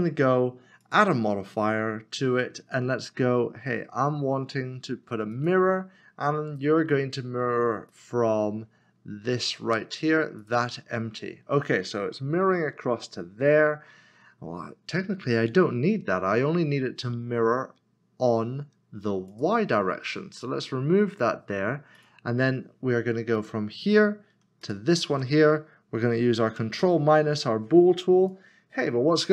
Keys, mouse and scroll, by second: 0.8 click, 5.3 click, 7.9 click, 10.4 click, 19.3 click, 24.6 shift+click, 26.8 ctrl+-, 28.2 click.